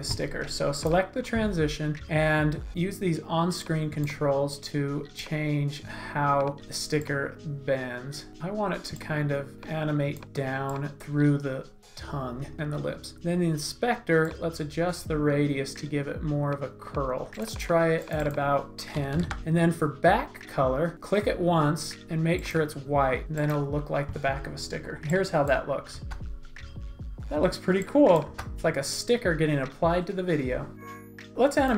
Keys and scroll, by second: 18.7-19.7 typing, 25.9 space, 28.3 space.